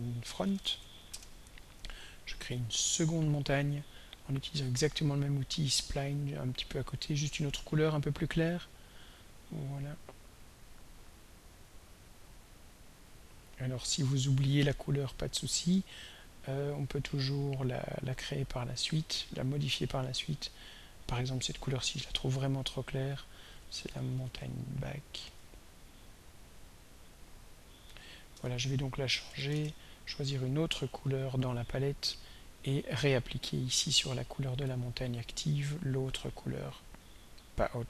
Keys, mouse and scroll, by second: 0.1-1.3 typing, 3.3 click, 5.6 click, 9.0 click, 11.0 click, 12.2 click, 12.9 click, 14.3 right click, 15.4 click, 18.9 click, 20.2 click, 22.3 click, 23.6-24.8 typing, 26.2 click, 26.4 click, 27.0 click, 27.7 click, 28.4 shift+End, 29.3 Delete, 29.6 Return, 31.9 click, 34.8 right click, 36.3 click.